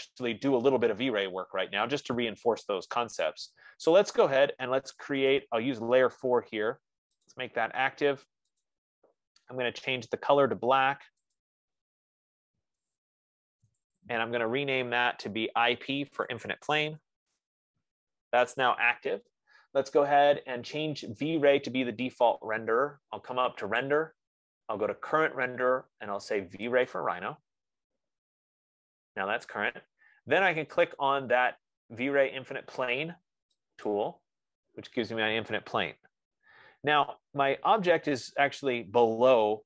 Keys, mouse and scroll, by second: 2.2 middle click, 3.4 middle click, 5.8 scroll, 5.9 click, 7.5 click, 8.9 click, 11.7 click, 13.3 click, 14.2 click, 14.4 F15, 14.4 click, 16.6 click, 17.1-17.8 typing, 24.2-32.2 drag, 34.6-39.2 drag.